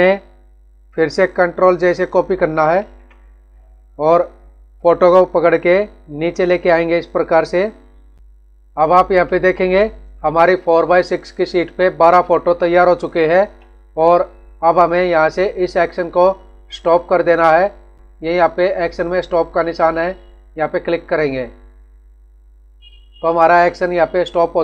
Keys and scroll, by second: 0.1 Down, 1.0 Left, 2.7 ctrl+j, 8.1 Down.